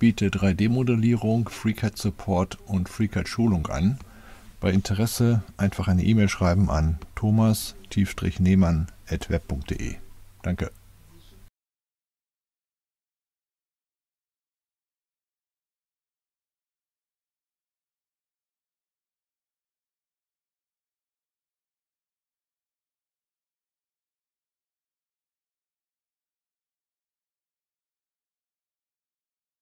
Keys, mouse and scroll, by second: 0.3 click, 1.5 click, 2.4 click, 5.3 click, 7.3 click, 8.4 click, 8.7 ., 9.5 ., 10.2 right click, 11.8 click, 13.1 click, 15.1-16.0 right drag, 16.2 click, 16.8 click, 18.0 click, 18.7 click, 20.0 click, 21.5 click, 25.1-25.6 scroll down 2, 25.6-26.3 scroll up 2, 26.3 middle click, 27.5 middle click, 28.5 right click, 29.1 click.